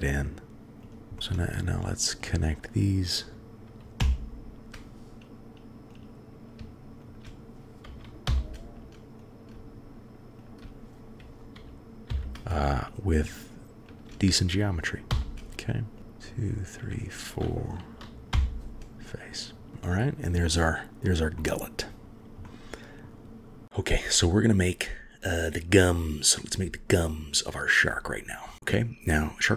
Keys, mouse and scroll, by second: 1.6-2.2 shift+middle drag, 4.0 f, 5.9-6.6 drag, 8.3 f, 12.1 f, 13.0 click, 13.8 shift+click, 16.0 shift+g, 16.7 shift+click, 18.3 f, 20.5-21.0 drag, 21.4 click, 22.0 scroll up 1, 22.5-23.5 drag.